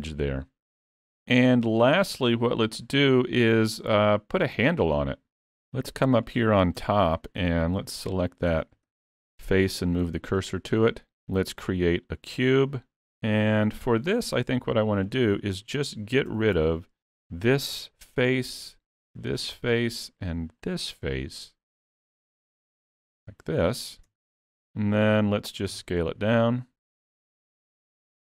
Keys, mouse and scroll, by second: 0.1 scroll down 1, 0.4 middle click, 2.0 scroll down 3, 2.3 middle click, 4.9 scroll up 3, 6.2 click, 6.8 Tab, 7.9 3, 8.0 click, 8.9 shift+s, 10.1 alt+a, 10.4 Tab, 11.2 shift+a, 14.0 click, 16.4 Tab, 16.6 3, 17.0 click, 18.1 middle click, 19.1 shift+click, 19.5 middle click, 20.7 shift+click, 21.1 middle click, 22.3 x, 24.1 Tab, 25.7 s.